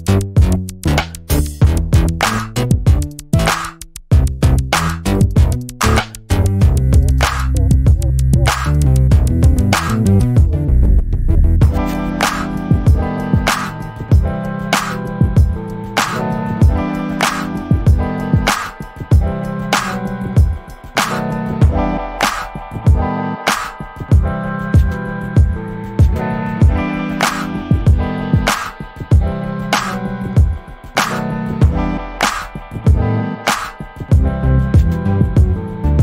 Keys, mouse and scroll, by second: 1.0-1.5 scroll down 1, 1.6 alt+middle click, 5.4 click, 13.7 scroll down 1, 14.3 alt+middle click, 14.9 shift+click, 18.1 middle click, 18.7 alt+click, 19.3 alt+middle click, 19.6-20.1 scroll down 1, 20.1 alt+click, 22.2 middle click, 23.1 scroll down 1, 23.4 alt+middle click, 23.7-24.5 alt+scroll up 2, 24.5 ctrl+click, 27.6 alt+middle click, 29.3 shift+click, 30.2 ctrl+z, 30.7 click, 34.9 click, 34.9-35.6 scroll down 1, 35.6-36.0 scroll up 1.